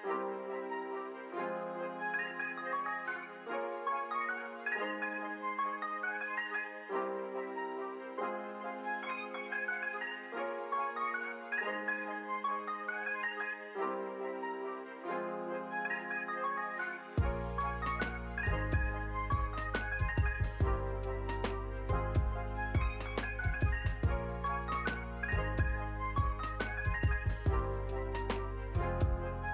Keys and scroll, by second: 0.5 space, 3.0 p, 4.5 ctrl+v, 6.9 Return, 8.4 p, 9.5 ctrl+v, 10.3 Left, 11.7 Return, 13.6 p, 15.4 ctrl+v, 16.3 Return, 18.1 p, 19.4 ctrl+v, 19.6 Return, 23.4 space, 26.7 space.